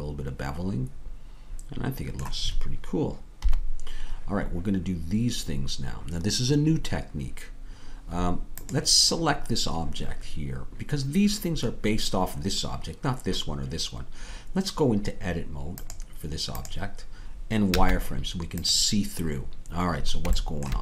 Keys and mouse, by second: 3.4 KP_3, 17.7 z.